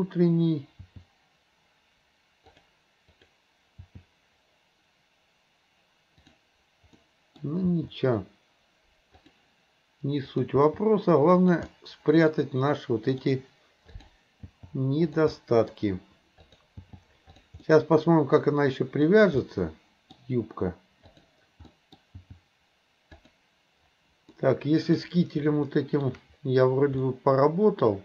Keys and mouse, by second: 0.9 g, 3.1 click, 3.8 g, 6.2 click, 7.0 middle click, 7.7 g, 10.3 click, 10.6 g, 11.8-13.2 middle drag, 14.4 g, 15.4 middle click, 16.8 g, 17.7-19.1 middle drag, 19.4 middle click, 21.7 middle click, 22.2 g, 24.4 middle click, 25.7 shift+middle click, 27.1 middle click.